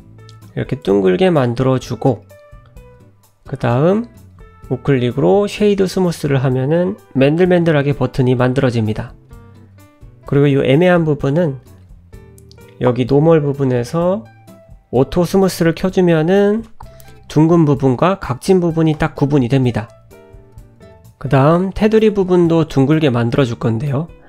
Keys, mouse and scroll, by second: 1.4 Tab, 1.7 click, 2.1 scroll up 1, 2.2 middle click, 3.7 click, 4.4 right click, 6.2 middle click, 8.2-8.5 scroll up 1, 8.5 middle click, 9.0-9.3 scroll up 1, 11.9 click, 13.6 click, 14.0 click, 15.2 click, 16.6-17.3 scroll down 4, 17.3 middle click, 18.6-19.2 scroll up 2, 19.2 Tab, 20.1 2, 22.1 alt+click.